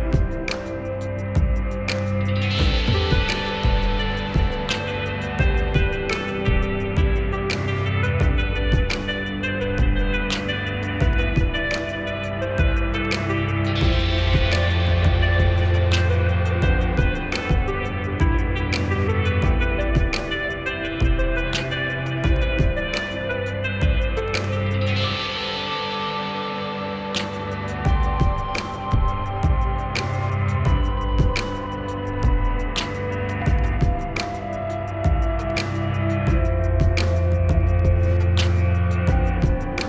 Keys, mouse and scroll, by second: 3.2 scroll up 1, 4.0-5.5 drag, 5.5 scroll down 1, 6.4 click, 7.7 scroll up 1, 8.5-9.8 drag, 9.8 scroll down 1, 10.1-13.3 drag, 14.5-21.4 drag, 22.9-26.4 drag, 26.8-27.4 scroll up 1, 28.7 click, 30.7-33.7 drag, 35.9 click, 35.9 typing, 37.2 typing, 38.1 click.